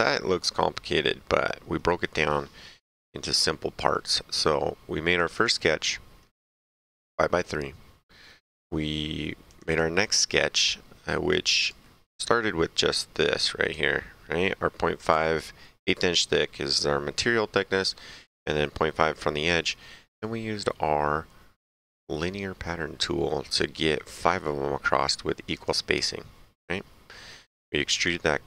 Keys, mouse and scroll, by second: 0.3 middle click, 5.1 click, 9.4 click, 11.6 click, 13.1 click, 20.0 middle click, 25.5 click, 27.9 click.